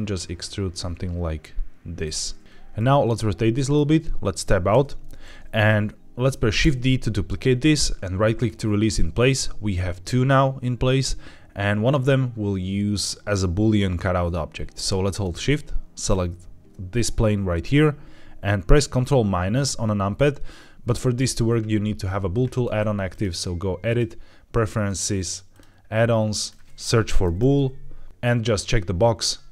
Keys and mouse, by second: 1.9 click, 2.4 KP_7, 2.6 middle click, 4.6 Tab, 6.5 shift+d, 8.2-9.5 right drag, 15.9 shift+click, 23.0-23.9 drag.